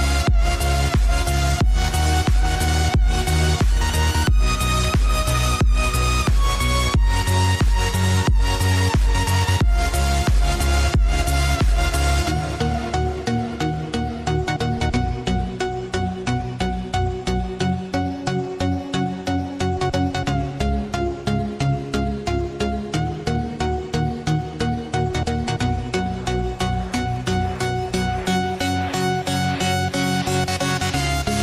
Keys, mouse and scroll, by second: 0.0 click, 0.5-2.0 drag, 3.6 Tab, 6.2 click, 6.9-10.4 drag, 11.2 click, 12.5 scroll down 1, 13.2 KP_7, 14.8-16.1 scroll down 1, 16.1-17.8 drag, 17.8 Delete, 18.6-19.6 scroll up 1, 19.6 click, 20.5 shift+a, 24.1 Tab, 24.6 click, 25.3 click, 26.8 b, 28.2 click, 29.9 click, 30.9 b.